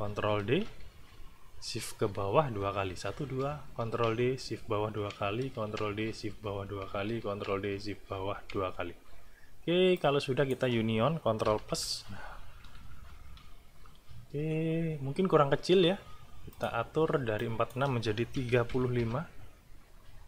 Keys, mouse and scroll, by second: 0.3 ctrl+d, 2.4 shift+Down, 3.8 ctrl+shift+d, 4.4 ctrl+shift+Down, 5.5 ctrl+d, 6.1 ctrl+shift+Down, 7.3 ctrl+d, 7.7 ctrl+shift+Down, 9.9 click, 13.9 =, 16.5 click, 17.4 click, 18.3 KP_3, 18.7 KP_5, 18.9 Return.